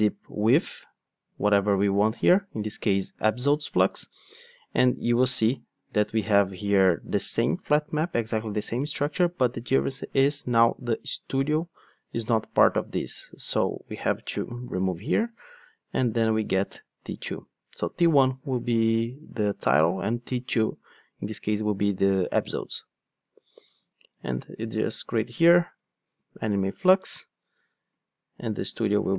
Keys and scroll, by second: 0.2 Return, 24.4 alt+Return.